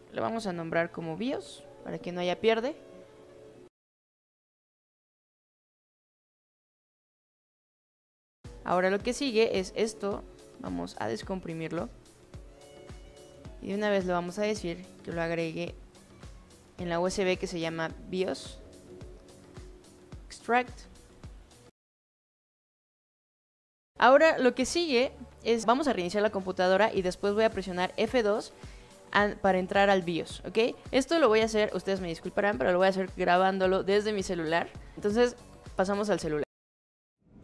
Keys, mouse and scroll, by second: 0.5-1.8 typing, 3.7 shift+click, 5.1 shift+click, 6.9 shift+drag, 8.9 shift+click, 10.5 shift+click, 12.0 click, 13.5 click, 15.1-16.0 drag, 16.5 click, 18.6 click, 20.2 click.